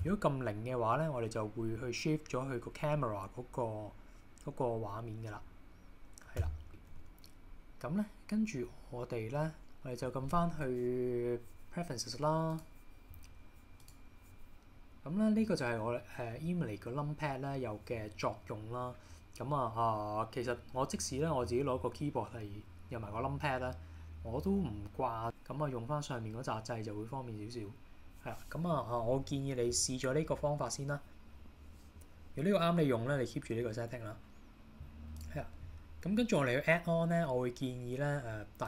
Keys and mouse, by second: 0.1 KP_0, 6.4 KP_0, 7.0 KP_1, 8.8 middle click, 9.6 h, 12.7-14.0 drag.